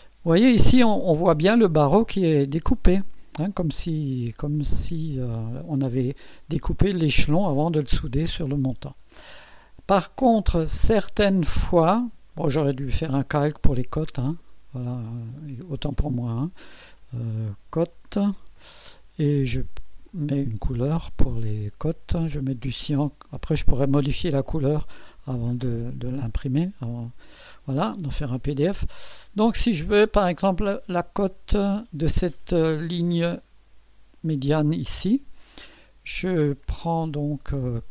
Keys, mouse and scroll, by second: 0.1 scroll down 1, 0.8 scroll up 1, 1.4 middle click, 8.9-10.0 scroll down 6, 10.4 middle click, 11.4-12.5 middle drag, 12.7-13.9 middle drag, 14.2 middle click, 15.7 click, 17.4-19.1 typing, 20.1 click, 22.9 click, 24.7 click, 25.6-25.9 scroll down 1, 26.3-30.1 middle drag, 30.3 scroll up 1, 31.1-31.8 scroll up 2.